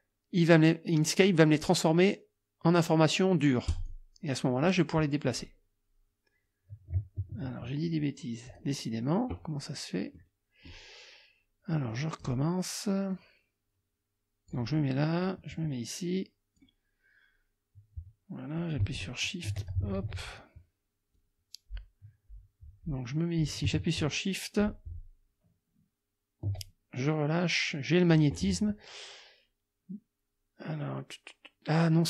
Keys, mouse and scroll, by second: 3.7 click, 5.3 click, 7.2 ctrl+z, 8.5 click, 10.2 click, 11.9 click, 13.1-14.7 drag, 15.2-16.8 drag, 18.6-19.9 shift+drag, 20.0 ctrl+shift+z, 21.2-28.3 drag.